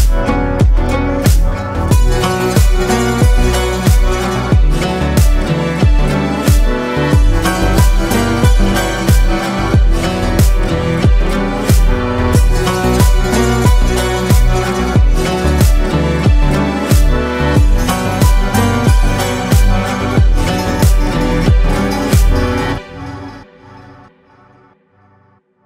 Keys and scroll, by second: 1.2 ctrl+space, 24.1 ctrl+space.